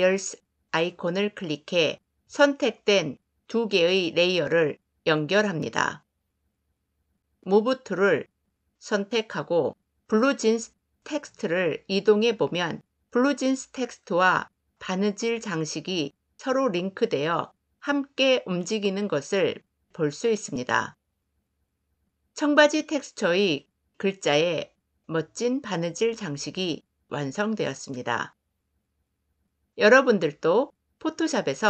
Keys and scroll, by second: 7.4 v, 16.3 ctrl+z.